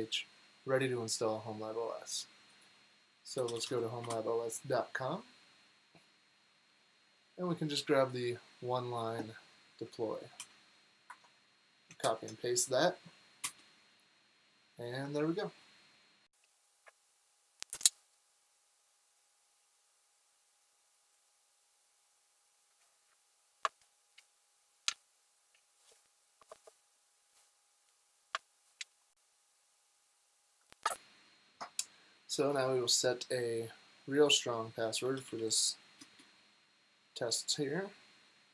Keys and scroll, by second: 2.5-4.5 typing, 10.4 super+c, 11.1 super+Tab, 12.0 super+v, 13.4 Return, 32.3 BackSpace, 34.7-35.8 typing, 36.0 Return.